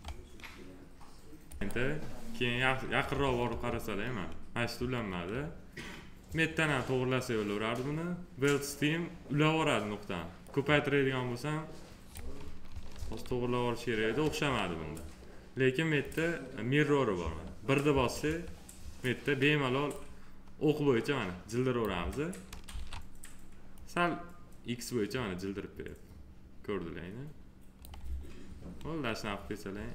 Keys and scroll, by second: 3.3 F3, 12.8 ctrl+z, 17.0 1, 22.5 ctrl+z.